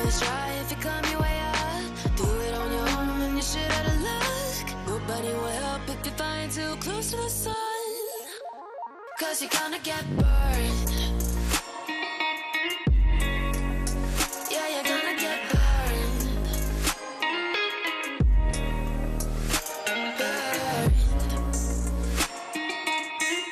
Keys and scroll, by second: 6.2 F2, 17.2 space, 18.2 c, 18.6 Escape, 19.9 r, 20.4 Escape, 21.8 r, 23.0 Escape.